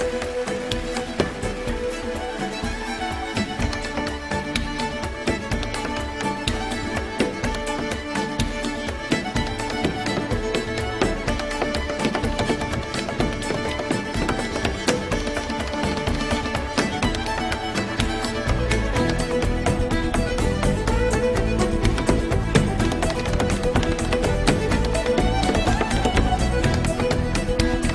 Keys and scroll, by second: 1.7 super+j, 12.3 super+j.